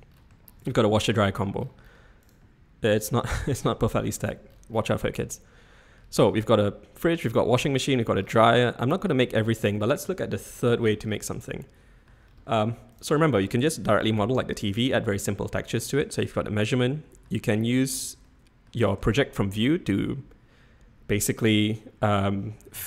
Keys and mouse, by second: 0.6 click, 1.2-1.6 drag, 5.3-6.0 drag, 8.8-9.2 middle drag, 9.7-10.6 middle drag, 11.6-12.2 shift+middle drag, 16.3-17.2 middle drag, 17.6-18.0 shift+middle drag, 18.3-18.7 middle drag, 19.2-19.6 shift+middle drag.